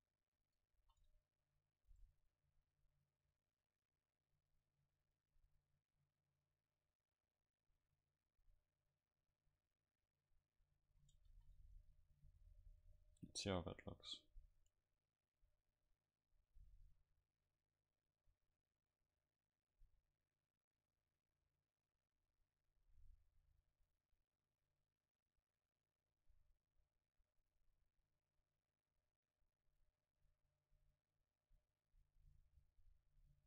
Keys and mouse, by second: 0.8 ctrl+s, 1.5-3.0 middle drag, 3.6-5.9 drag, 5.9-7.5 middle drag, 6.5-8.4 drag, 9.0-10.6 drag, 10.6 a, 11.1 a, 11.3 ctrl+s, 13.5 F12, 16.7-19.5 middle drag.